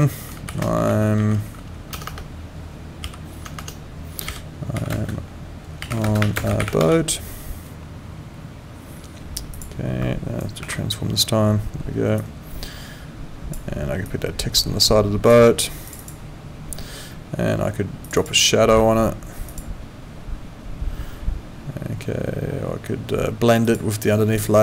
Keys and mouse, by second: 1.9 BackSpace, 4.9-7.2 typing, 9.5 click, 12.2 click, 14.0 click, 15.9 click, 18.0 click, 19.5 click, 23.6 click.